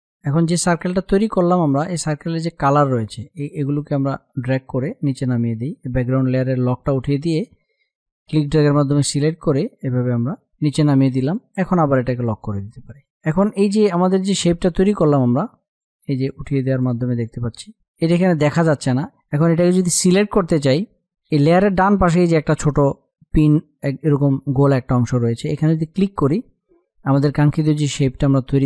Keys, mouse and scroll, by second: 1.6 space, 1.7 click, 2.1 space, 3.0-6.1 drag, 6.1-10.4 drag, 10.4 space, 10.6 click, 11.0 space, 12.1 click, 12.7 space, 14.6 click, 25.7 click.